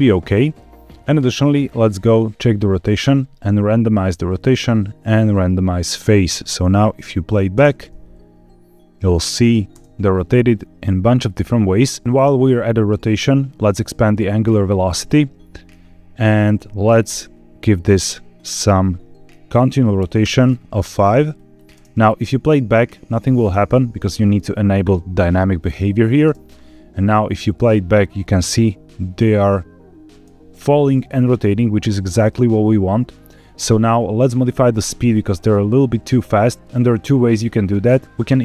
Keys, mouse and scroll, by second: 0.7 click, 0.7 scroll down 2, 2.3 click, 3.5 click, 5.2 click, 6.8 click, 7.4 space, 9.6 space, 14.5-15.3 drag, 16.9 click, 18.2-20.1 drag, 21.2 click, 21.6 space, 23.4 space, 24.7 click, 25.7 drag, 26.1 space, 26.9 scroll down 2, 28.1 scroll up 2, 30.0 space, 31.3-31.7 scroll down 1, 31.7 scroll up 1, 34.7-35.1 scroll down 1, 37.2-38.0 scroll down 4, 38.0 click, 38.0 scroll up 3, 38.2-38.4 scroll down 7.